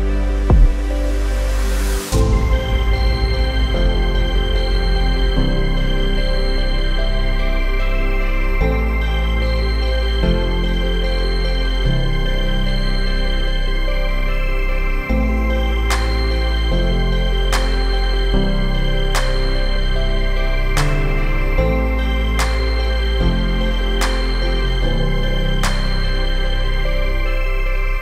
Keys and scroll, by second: 5.3 3, 6.4 ,, 7.3 5, 8.4 Return, 13.4 3, 14.0 Return, 24.0-25.4 typing, 25.9 Return.